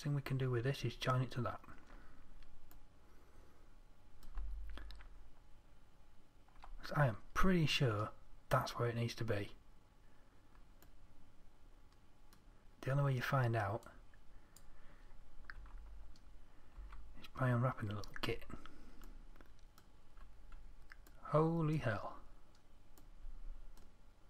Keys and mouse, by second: 3.2-11.3 middle drag, 14.3-16.0 middle drag, 16.0 Tab, 17.2 a.